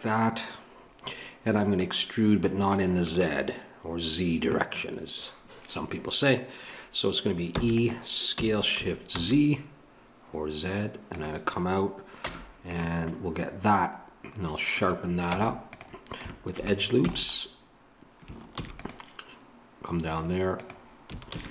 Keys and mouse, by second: 7.5 e, 12.2 Tab, 15.2 Tab, 17.0 a, 18.6 ctrl+r, 21.3 ctrl+r.